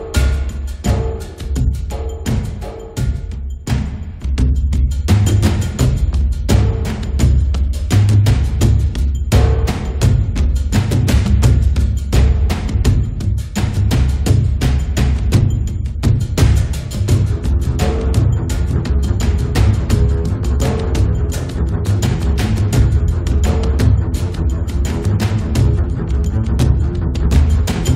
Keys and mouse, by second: 0.6-3.3 drag, 2.3-3.3 right drag, 3.3 middle click, 3.4-7.3 drag, 3.4 right click, 4.1 right click, 5.1 right click, 7.3-10.2 middle drag, 12.1 click, 12.8 click, 13.3 middle click, 13.5 click, 13.5 right click, 14.4 middle click, 14.7-17.9 drag, 14.7 right click, 15.7-17.5 middle drag, 17.7-19.6 middle drag, 17.9 right click, 21.2 f, 21.3-22.9 drag, 22.9 middle click, 23.0-24.5 drag, 23.5 f, 24.5 middle click, 24.5-25.7 drag, 25.7 middle click, 26.4 click, 26.6 middle click, 26.9 right click, 27.1 click, 27.6-27.9 middle drag.